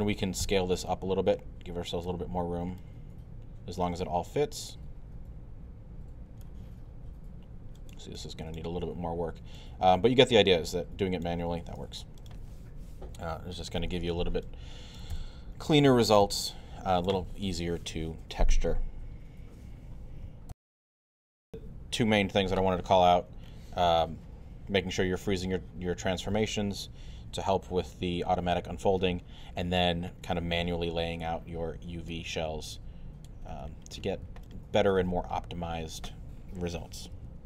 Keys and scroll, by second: 0.4 r, 2.1 w, 20.5 super+..